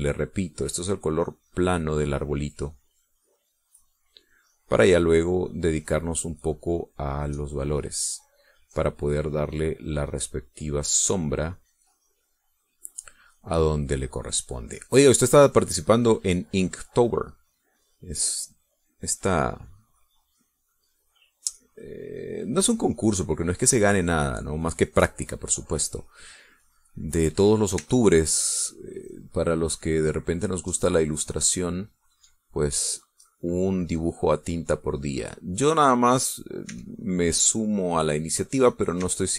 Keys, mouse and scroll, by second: 0.4 click, 1.4-2.4 drag, 2.6 click, 3.6-4.9 drag, 5.3-7.9 drag, 8.1 middle click, 9.2 middle click, 10.0-13.0 drag, 13.6-16.3 drag, 16.6-23.2 drag, 23.4 click, 24.0 middle click, 24.9 click, 25.9-28.1 drag, 28.8 e, 29.2-32.9 drag, 33.3-37.6 drag, 37.7 e, 38.0-39.1 drag.